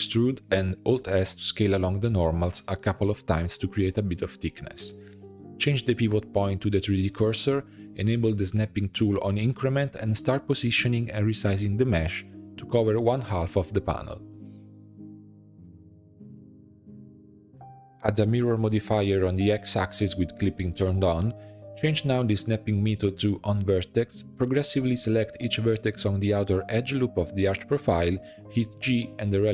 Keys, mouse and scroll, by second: 1.0 scroll down 2, 1.8 alt+click, 2.3 shift+middle click, 2.7-3.0 scroll up 1, 3.0 e, 3.6 alt+s, 6.5 scroll down 2, 7.0 a, 7.4-10.6 drag, 10.6 shift+middle click, 11.1 a, 11.5-12.8 scroll up 2, 12.8 click, 13.1 s, 15.4 shift+middle click, 15.7-16.2 scroll up 4, 16.2 g, 17.8 Tab, 18.0-20.2 drag, 20.6-21.1 shift+middle drag, 21.1 click, 21.8 Tab, 22.0 1, 22.7-23.9 drag, 23.9 shift+middle click, 24.1 click, 24.4-24.9 scroll up 3, 24.9 click, 25.3-25.7 scroll up 1, 25.7 g, 26.9 shift+middle click, 27.1 scroll up 1, 27.4 click, 27.8 g, 28.9 scroll down 1, 29.1 shift+middle click.